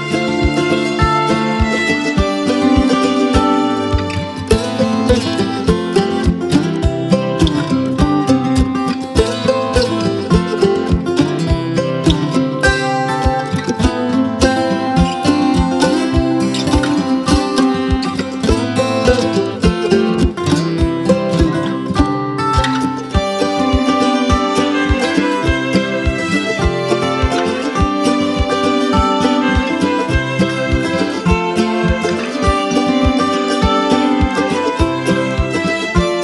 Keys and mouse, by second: 3.6 click, 6.4 click, 7.6 ctrl+click, 10.4 click, 13.2 click, 16.9 ctrl+z, 17.4 space, 17.6 click, 17.9 space, 19.1 click, 21.7 ctrl+click, 23.5 ctrl+click, 29.8 click, 34.0-34.9 drag, 35.7 ctrl+click.